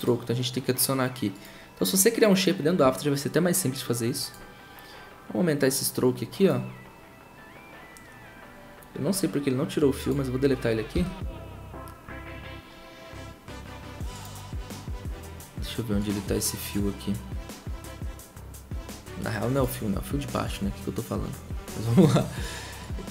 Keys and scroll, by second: 10.9 Delete.